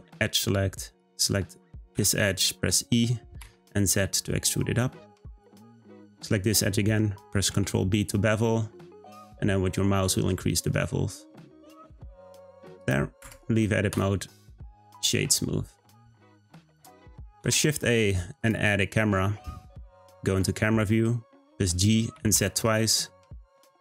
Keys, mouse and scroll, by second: 0.4 click, 1.9 e, 5.9 click, 7.5 b, 13.2 Tab, 13.9-14.8 right drag, 14.8 click, 15.6-17.2 scroll up 1, 17.4 shift+a, 19.2 `, 21.5 g.